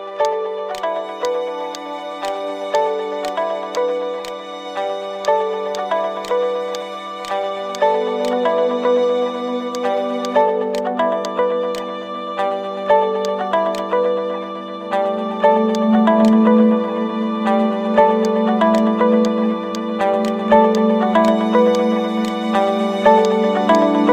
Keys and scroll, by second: 14.0 m, 16.6 Delete.